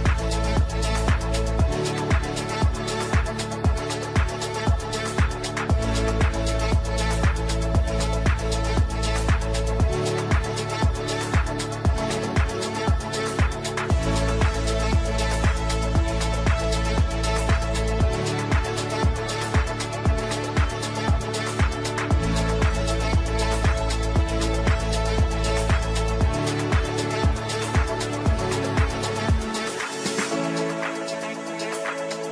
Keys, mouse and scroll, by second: 0.4 F3, 0.9-7.7 drag, 7.7 right click, 8.5 click, 9.9 right click, 10.8 click, 12.4 right click, 13.4 click, 14.9 F2, 15.1-16.5 drag, 17.7 right click, 19.4 click, 20.3-22.6 shift+drag, 25.3 right click, 26.4 click, 28.1 shift+click, 29.7 F3, 30.3 alt+click, 31.1 ctrl+g, 31.6 shift+click, 31.9 c.